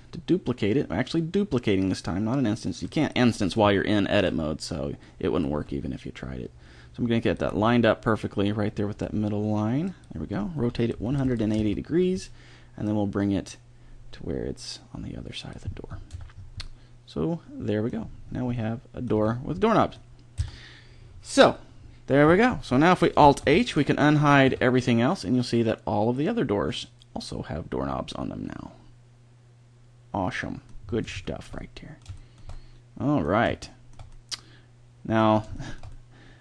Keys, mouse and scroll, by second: 5.5 g, 9.0 g, 10.6 r, 12.9-13.9 drag, 16.1 Tab, 19.1 a, 20.3 KP_1, 23.4 alt+h, 24.5 a, 28.1-28.7 middle drag, 29.1 middle drag, 30.8-35.1 middle drag, 35.9 middle click.